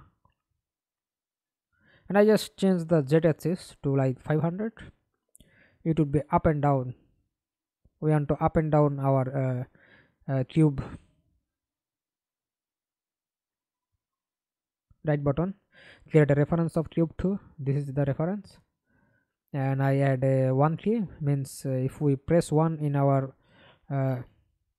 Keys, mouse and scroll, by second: 3.5-4.6 typing, 4.6 Return, 8.6 right click, 14.1 right click, 15.7-16.5 scroll up 3, 17.3 right click, 18.9-20.2 typing, 21.0 Down, 21.3 Return.